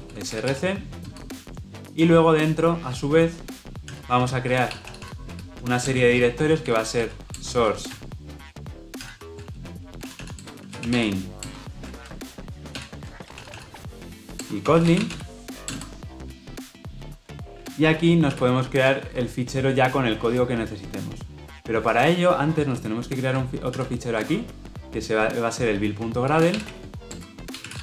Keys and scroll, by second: 3.8 alt+Insert, 8.9 alt+Insert, 12.6 alt+Insert, 23.6 alt+Insert.